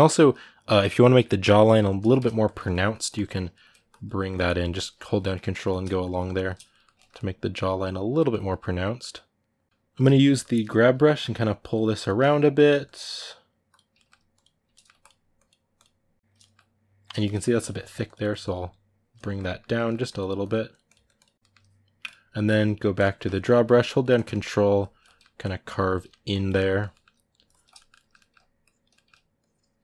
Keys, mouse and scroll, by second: 1.6 ctrl+shift+middle click, 2.2 ctrl+click, 2.4 middle click, 2.7-4.4 ctrl+drag, 4.4 middle click, 4.7 ctrl+click, 5.0 middle click, 5.3 ctrl+click, 5.5 middle click, 5.8 shift+click, 6.5-9.8 ctrl+middle drag, 9.8 g, 10.0 f, 10.8-11.8 drag, 11.8 ctrl+middle click, 12.3 click, 12.8 middle click, 13.5 click, 13.7 ctrl+middle click, 14.1 click, 14.5 ctrl+middle click, 14.8-16.1 drag, 16.1-17.4 ctrl+middle drag, 17.4-18.9 drag, 18.9 ctrl+middle click, 19.8-21.3 drag, 21.3 middle click, 21.8-23.1 drag, 23.1 ctrl+middle click, 23.6 ctrl+click, 24.1 middle click, 24.6 ctrl+click, 24.8 middle click, 25.2 ctrl+click, 25.7 middle click, 26.1 ctrl+click, 26.3 middle click, 27.3 ctrl+click, 27.5 shift+middle click, 28.4 ctrl+click, 28.7 middle click, 29.2 ctrl+click.